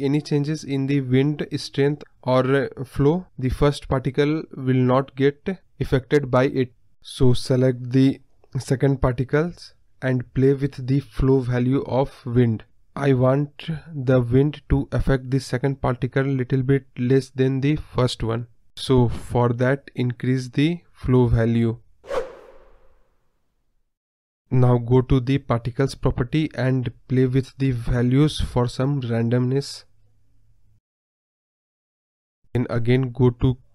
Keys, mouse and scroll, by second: 0.4 space, 0.8 space, 1.3-4.3 drag, 4.3 space, 4.9 space, 5.4 click, 5.8 space, 6.1 space, 6.7 click, 8.7 space, 9.3-10.8 middle drag, 12.3 KP_3, 14.0-17.4 middle drag, 17.4-18.7 drag, 19.8-27.7 drag, 27.7 KP_0, 29.5-30.3 scroll down 17, 30.3 click, 30.5-31.5 scroll down 1, 31.6-32.9 drag, 33.2-33.7 scroll down 11.